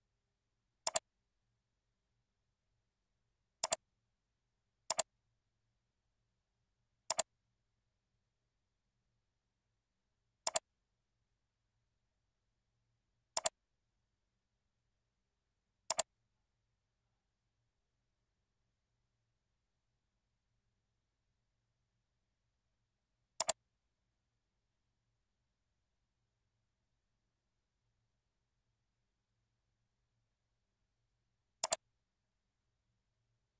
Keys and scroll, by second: 0.4 ctrl+v.